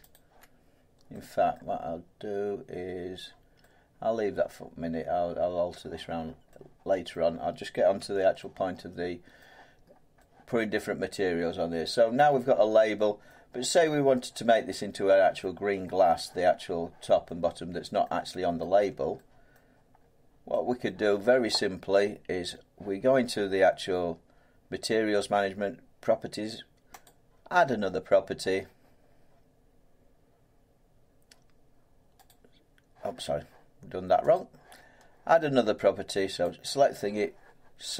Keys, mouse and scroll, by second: 0.1 alt+click, 1.5 middle click, 3.1 middle click, 3.2 middle click, 5.2 scroll down 2, 5.7 middle click, 6.2-6.6 scroll down 3, 7.1 middle click, 8.0 Tab, 9.2 scroll, 9.4 middle click, 9.8 scroll, 9.9 scroll down 1, 13.2 middle click, 15.4 middle click, 18.0 middle click, 18.6 middle click, 18.7 Tab, 19.5 middle click, 20.0 middle click, 20.1 middle click, 20.8 middle click, 22.8 scroll up 2, 22.9 Tab, 27.0 click, 28.2-32.1 drag, 34.3 click, 36.4 click.